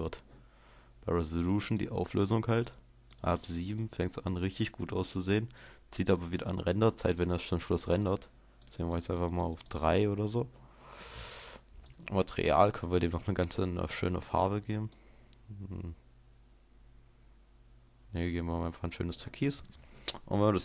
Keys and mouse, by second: 0.2-1.4 middle drag, 1.4-15.8 drag, 15.8-17.6 middle drag.